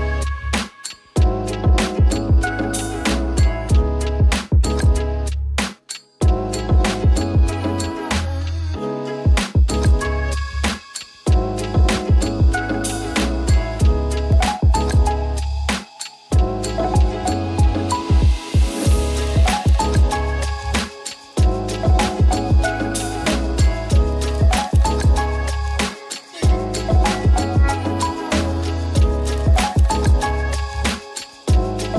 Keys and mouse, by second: 0.5 middle drag, 0.9 s, 4.0 s, 4.4 ctrl+shift+d, 4.5 ctrl+z, 6.9 shift+d, 8.8-11.5 middle drag, 11.6-12.4 drag, 12.8-13.7 middle drag, 14.2 ctrl+z, 14.4-14.9 middle drag, 15.1-18.4 drag, 18.6-19.8 middle drag, 20.6 click, 20.9 middle click, 22.0-22.5 shift+middle drag, 25.8-26.1 middle drag, 27.1-28.0 middle drag.